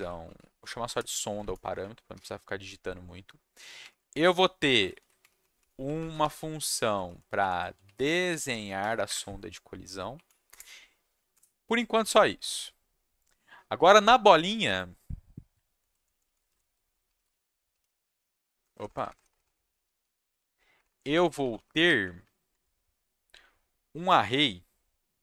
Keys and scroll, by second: 0.0-2.1 typing, 4.3 ctrl+c, 4.5 ctrl+v, 4.7 Return, 4.9 ctrl+v, 5.4 Right, 5.7 Right, 5.8 Right, 5.9 Right, 7.0 shift+Right, 7.4 shift+Left, 7.5-9.3 typing, 10.5 Return, 11.3 BackSpace, 15.7 ctrl+shift+Down, 16.1 Left, 16.6-20.6 typing, 20.7 Down, 20.8 Down, 21.0 Down, 21.1 Down, 21.2 Down, 21.4 Down, 21.5 Down, 21.7 Down, 21.8 Down, 22.2 Down, 22.5 Tab.